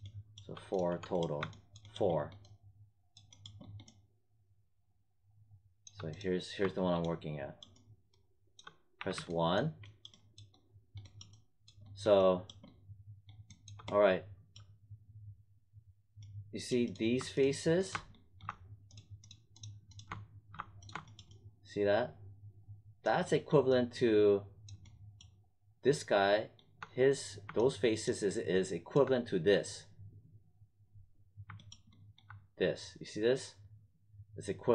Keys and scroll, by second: 8.9 1.